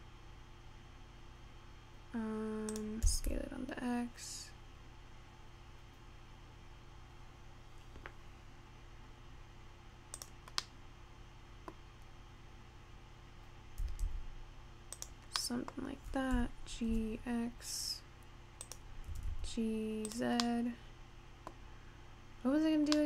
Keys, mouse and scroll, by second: 3.4 s, 10.8-12.0 middle drag, 12.0-12.9 scroll up 2, 13.1-14.0 scroll down 1, 14.0 s, 16.0 middle click, 16.9 g, 19.2 g, 20.8-23.0 middle drag.